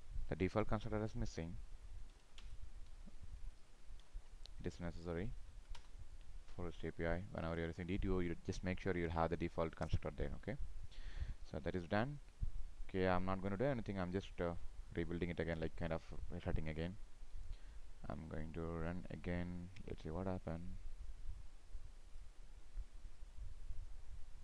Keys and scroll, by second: 7.0 ctrl+shift+f, 7.5 ctrl+s, 11.6 ctrl+s.